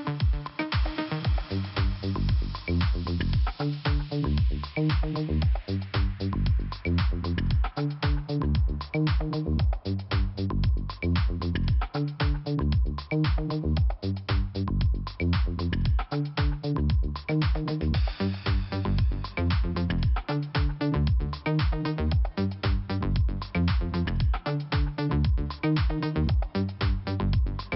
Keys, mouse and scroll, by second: 0.0 scroll up 1, 1.8 click, 3.7 scroll up 1, 4.6 click, 4.7 click, 5.2 click, 7.4 click, 7.4 click, 7.9 click, 8.9 scroll down 2, 9.8 click, 12.7-13.1 scroll up 2, 13.7 click, 13.7 click, 14.3 click, 15.8 click, 16.8 click, 17.7 click, 19.4 click, 19.5 click, 20.0 click, 20.9 scroll down 2, 21.8 click, 24.3 click, 25.6 click, 26.6 click, 26.9 scroll down 1.